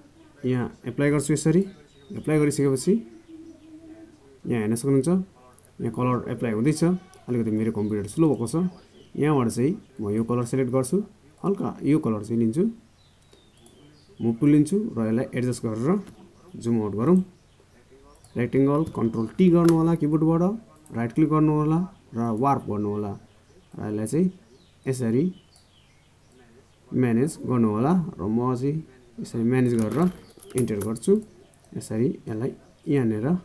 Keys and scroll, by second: 18.8 ctrl+t.